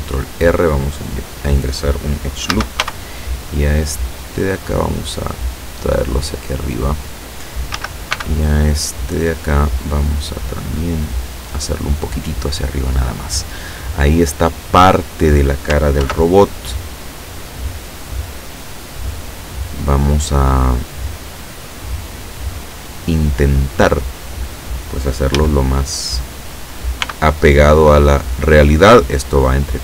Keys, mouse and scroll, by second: 0.3 click, 1.2 click, 2.6 a, 2.9 b, 3.6 click, 4.6-6.6 drag, 7.8 a, 8.2 b, 8.8 click, 10.2-12.4 drag, 16.1 ctrl+r, 17.0 click, 18.7 click, 25.4 a, 27.1 b, 27.6-28.6 drag, 29.0-29.8 drag.